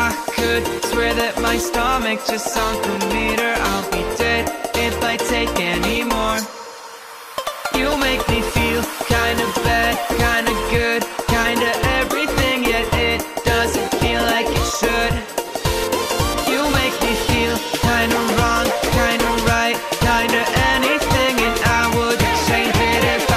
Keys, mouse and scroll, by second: 0.5 Delete, 2.0 middle click, 3.2 alt+shift+click, 3.5 middle click, 6.6-8.4 drag, 12.4 click, 12.9-14.3 middle drag, 14.3-14.8 scroll down 1, 14.8 r, 16.1 click, 16.8 ctrl+z, 18.6 s, 19.4 click, 19.7-20.8 middle drag, 21.3 e.